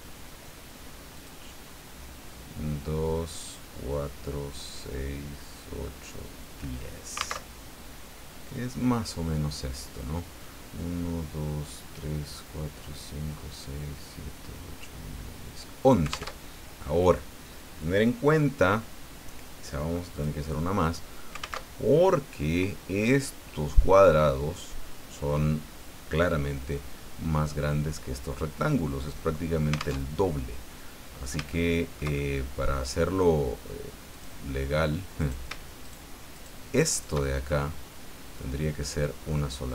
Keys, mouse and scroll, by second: 1.2 click, 7.4 alt+Tab, 16.4 alt+Tab, 20.1 click, 21.6 alt+Tab, 30.0 alt+Tab, 30.7 click, 31.4 shift+middle click, 31.5-32.8 shift+middle drag, 34.1 click, 35.2 right click, 35.8 shift+right click, 36.3 shift+right click, 36.9 shift+right click, 37.5-39.7 shift+middle drag.